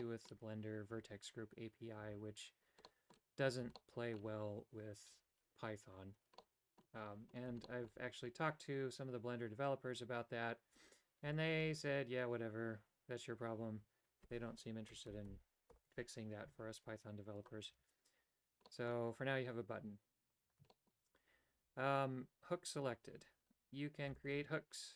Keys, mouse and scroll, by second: 0.1 middle click, 2.9 middle click, 3.8 shift+middle click, 6.5 middle click, 7.7 shift+middle click, 15.1 ctrl+KP_Add, 15.5 ctrl+KP_Add, 15.9 ctrl+KP_Add, 16.6 g, 17.9 a, 18.8 middle click, 20.8 shift+middle click, 24.3-24.9 alt+right drag.